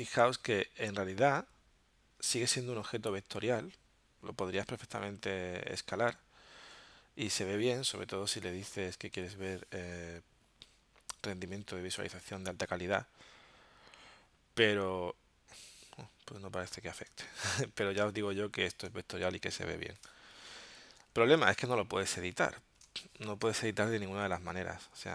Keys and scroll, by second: 17.1 z, 18.0 space, 20.0 space, 22.8 space, 23.5 v, 24.2 a.